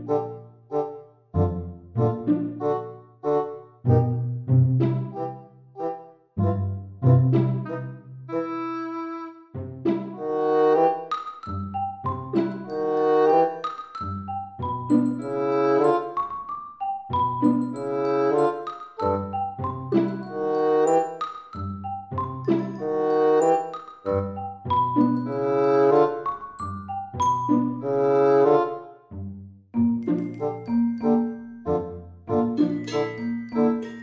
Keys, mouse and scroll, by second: 1.0 i, 4.0 middle click, 6.5 Tab, 7.3 middle click, 9.6-9.9 scroll down 2, 10.5 scroll down 1, 11.4 click, 15.6 right click, 17.7 click, 17.9 click, 22.4 click, 24.6 click, 28.3 right click, 30.3 click, 30.5 click.